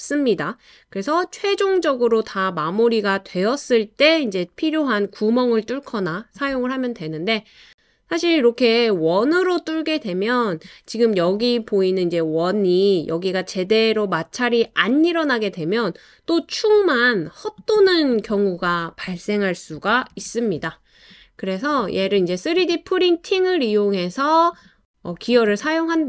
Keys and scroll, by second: 20.7 super+c, 20.9 super+v.